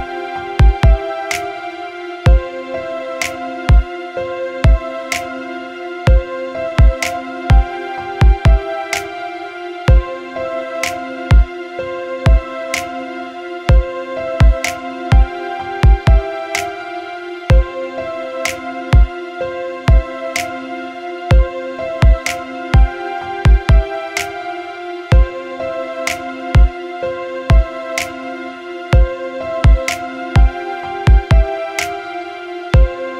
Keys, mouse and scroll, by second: 0.0 click, 4.0 click, 6.4 click, 8.7 click, 14.5 click, 25.7 middle click, 25.7 click, 30.7 click.